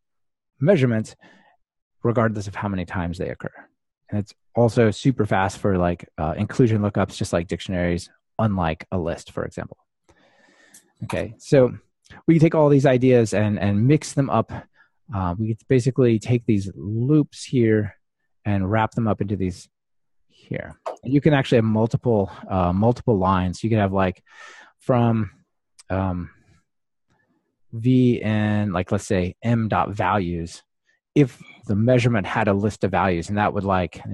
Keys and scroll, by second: 23.3 super+d, 29.4 ctrl+alt+shift+Right.